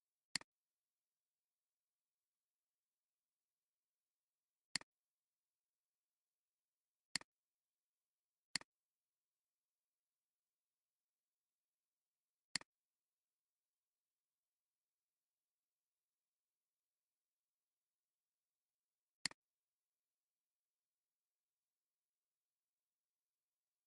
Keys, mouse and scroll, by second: 0.0 alt+scroll down 1, 0.9 space, 6.1 click, 6.7 click, 7.1 click, 12.5 click, 19.6 click, 21.6 click.